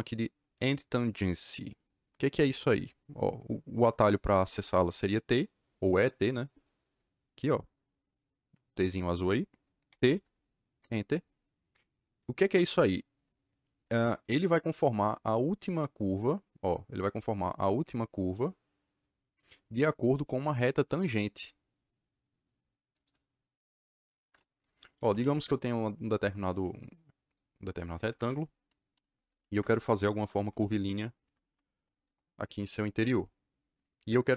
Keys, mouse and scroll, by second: 9.8 t, 10.8 KP_Enter, 22.9 click, 24.7-25.7 typing, 26.3 click, 27.2 click, 27.8 Escape, 28.2 Escape, 28.6-32.4 typing, 31.2 Escape, 31.3 Escape.